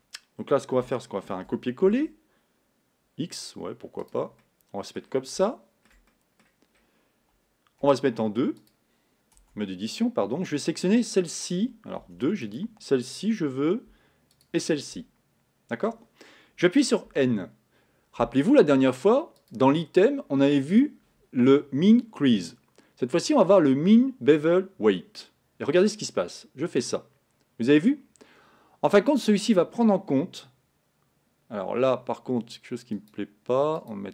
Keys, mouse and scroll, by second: 1.4 shift+d, 4.5-6.5 middle drag, 6.5-8.8 scroll up 2, 8.8 click, 9.4 Tab, 10.9 click, 12.1 2, 12.6 click, 14.5 shift+click, 17.2 n, 26.3-28.2 drag.